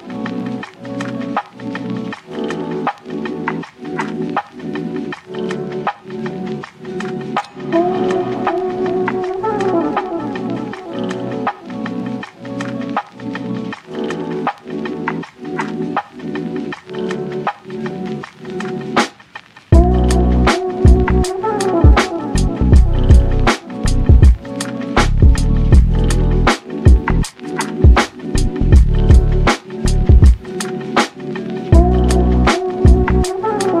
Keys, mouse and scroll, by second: 0.9 scroll up 3, 1.2-2.3 shift+middle drag, 2.3-3.0 shift+scroll down 1, 3.0 3, 3.3 click, 3.6 shift+click, 3.8 shift+click, 4.3 alt+e, 6.3 Tab, 6.5 scroll down 2, 6.7 click, 7.2 click, 8.1 /, 8.5 scroll down 2, 8.7 shift+middle drag, 9.0 scroll up 1, 9.1 middle click, 9.4 Tab, 10.1 3, 10.2-10.7 scroll up 5, 10.7 click, 11.0 shift+click, 11.1 shift+click, 11.6 x, 12.6 click, 13.1 x, 13.8 Tab, 13.9 click, 14.1 scroll down 4, 14.4-15.4 shift+middle drag, 15.4 /, 15.6-15.9 scroll down 2, 15.9-17.3 middle drag, 17.3 click, 18.1 KP_3, 18.5 z, 18.8 scroll up 1, 18.9-19.5 shift+middle drag, 19.5 g, 20.5-20.8 shift+middle drag, 20.8 Tab, 21.0 z, 21.3 click, 22.3 1, 22.5 click, 23.2 g, 24.4 Tab, 24.7 z, 24.9-25.2 scroll down 1, 25.2 click, 25.5-25.9 middle drag, 25.9-26.2 scroll down 5, 26.2-27.0 shift+middle drag, 27.0 ctrl+s, 27.3 click, 27.5 Tab, 28.0 3, 28.1 click, 28.4 middle click, 28.8 shift+d, 30.1 p, 30.5 Tab, 30.7 click, 30.9 click, 31.0 click, 31.4 Tab, 31.7 a, 32.2 e, 33.4 Tab.